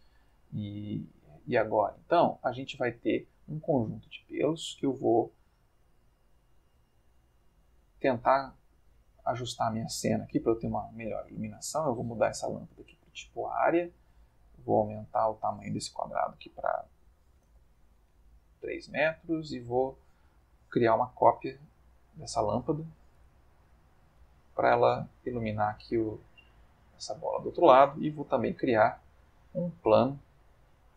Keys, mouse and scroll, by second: 0.5-4.2 ctrl+middle drag, 7.2-8.2 ctrl+middle drag, 8.5-9.8 ctrl+middle drag, 10.2 click, 11.6 click, 12.6 click, 14.6 click, 17.4 3, 17.5 Return, 19.0-19.8 middle drag, 21.8 click, 23.2 shift+d, 23.9 click, 24.2 r, 26.2 click, 26.5 g, 27.2 click, 28.1 shift+a, 29.0 click, 29.5 s, 30.3 click, 30.7-30.9 middle drag.